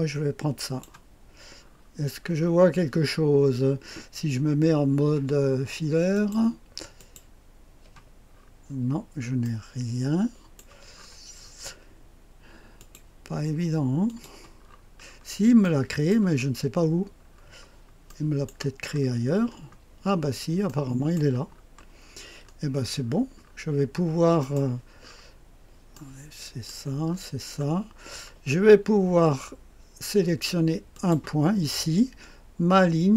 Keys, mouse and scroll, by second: 0.5 click, 1.5-3.1 scroll down 1, 3.1-6.0 scroll down 1, 6.0 click, 6.9 click, 8.2-9.4 scroll down 2, 9.4-10.9 right drag, 10.9-12.7 scroll up 2, 12.7 click, 14.0 click, 14.6-16.0 scroll down 2, 15.6-17.2 right drag, 16.2-17.2 scroll down 1, 17.2-18.0 scroll up 1, 18.0-19.1 right drag, 18.8-20.6 scroll up 2, 20.6-21.6 middle drag, 21.4-22.4 scroll down 2, 22.4-22.9 scroll up 2, 22.9-24.3 scroll down 2, 24.3-27.3 drag, 24.9-25.8 scroll up 2, 27.0-27.9 scroll up 2, 27.9-30.8 scroll down 2, 30.8 click, 31.5-33.0 scroll down 1, 33.0 click.